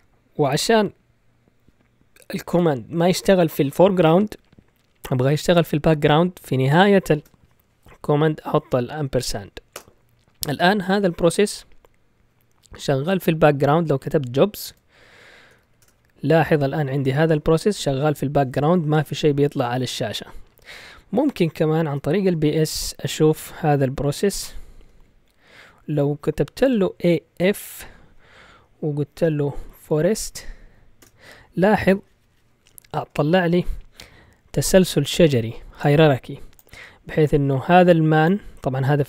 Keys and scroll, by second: 9.7 Return, 13.8-16.1 typing, 21.8-23.3 typing, 24.8 typing, 26.6-27.8 typing, 29.0-31.0 typing.